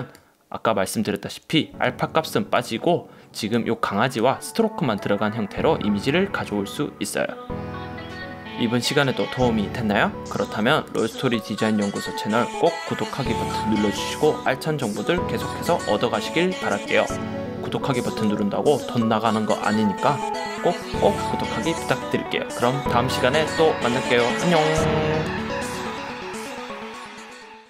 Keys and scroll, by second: 2.0 super+z.